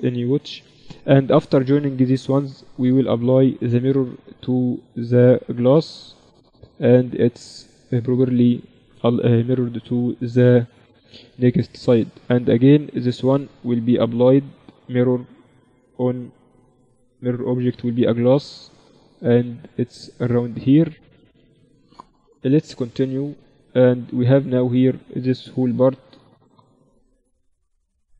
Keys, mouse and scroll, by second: 0.7-2.3 right drag, 1.1 z, 2.6-5.6 drag, 6.7-8.9 middle drag, 8.9-10.7 drag, 9.5 middle click, 10.5-12.1 middle drag, 10.5 right click, 12.1-15.3 right drag, 13.2-15.5 drag, 16.3-18.6 drag, 21.5 middle click, 22.3 KP_1, 22.9 z, 24.2-26.1 right drag, 26.1-28.1 middle drag.